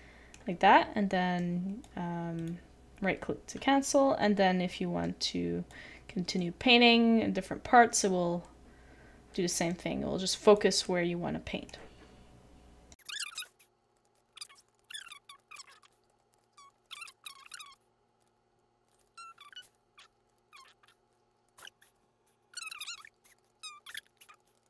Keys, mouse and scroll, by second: 13.2 middle click, 13.3 shift+middle click, 13.4 shift+middle click, 13.8 right click, 13.9 shift+middle click, 14.0 shift+middle click, 14.1 Tab, 14.2 middle click, 14.5 Tab, 14.6 middle click, 14.7 shift+middle click, 15.4 shift+middle click, 15.6 middle click, 15.9 Tab, 16.3 a, 16.4 shift+middle click, 16.4 scroll down 1, 16.4-16.9 scroll up 2, 16.6 shift+middle click, 17.0 shift+middle click, 18.2 shift+middle click, 18.9 shift+middle click, 19.0 middle click, 19.1 scroll down 1, 19.5 middle click, 19.5 scroll up 1, 19.6 shift+middle click, 20.2 middle click, 20.4 shift+middle click, 21.1 middle click, 21.1 scroll down 1, 21.2 scroll up 1, 21.3 middle click, 21.3 scroll down 1, 21.4 shift+middle click, 21.6 shift+middle click, 23.3 shift+middle click, 23.3 shift+middle click, 23.5 shift+middle click, 23.5 scroll up 1, 23.6-24.1 scroll down 2, 23.9 shift+middle click, 23.9 middle click, 24.1 middle click, 24.4 shift+middle click.